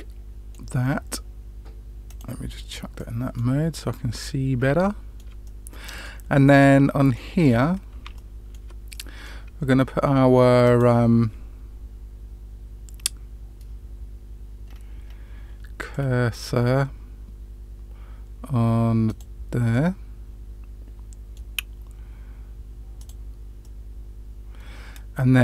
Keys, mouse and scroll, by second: 2.0 click, 2.9 middle click, 3.7-4.6 scroll up 3, 4.8 shift+middle click, 5.4 middle click, 6.4 middle click, 7.5-7.8 scroll up 1, 8.1 shift+middle click, 8.9 middle click, 10.6 click, 14.6-15.2 scroll up 3, 15.9 middle click, 19.0 click, 19.7-21.3 middle drag, 22.9 click, 23.6-25.4 middle drag.